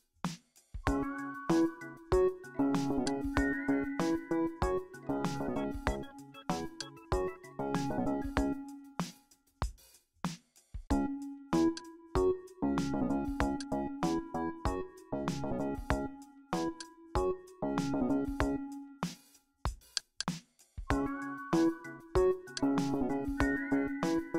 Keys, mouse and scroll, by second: 3.1-6.6 drag, 6.8-8.7 drag, 8.4 KP_6, 8.7 KP_5, 9.9 Return, 11.8 click, 13.6 click, 16.8 click, 20.0 shift+click, 22.6 click.